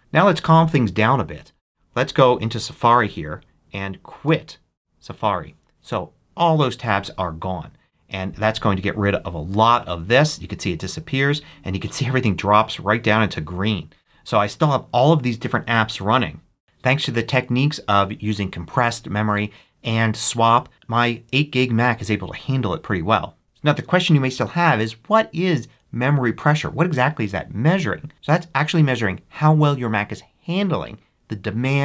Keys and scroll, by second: 2.7 super+q, 14.3 super+Tab.